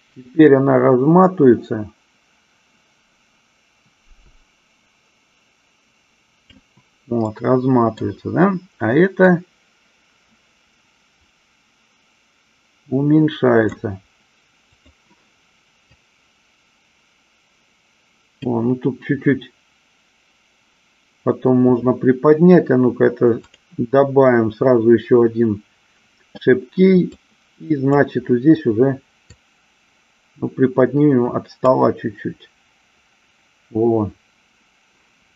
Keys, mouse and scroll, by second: 7.5 middle click, 9.6-14.0 drag, 14.9 click, 16.3-18.7 drag, 23.6 click, 27.5 click, 29.5-32.0 drag.